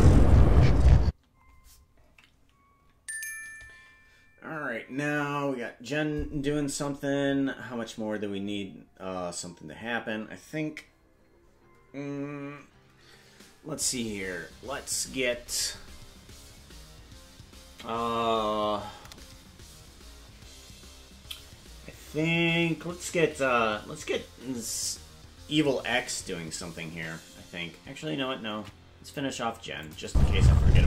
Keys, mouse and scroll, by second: 1.0 space, 7.2 scroll down 3, 27.0 ctrl+Tab, 28.5 ctrl+Tab, 29.8 click, 30.0 space.